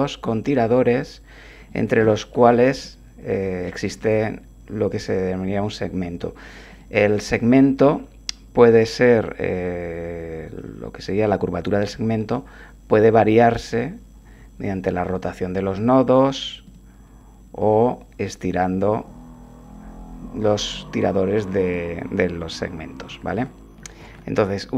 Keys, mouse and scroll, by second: 2.4 shift+click, 2.8-3.8 shift+drag, 4.0 1, 6.7 click, 12.2 r, 15.7 click, 16.6 click, 17.6 g, 21.6 click, 23.1 ctrl+z, 24.0 ctrl+z.